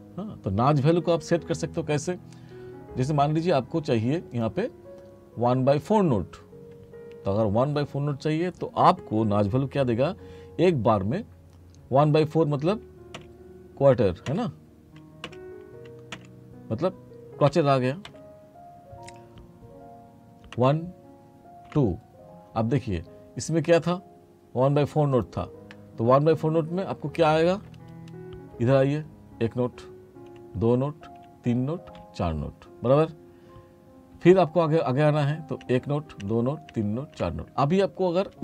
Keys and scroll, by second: 17.6 /, 20.6 m.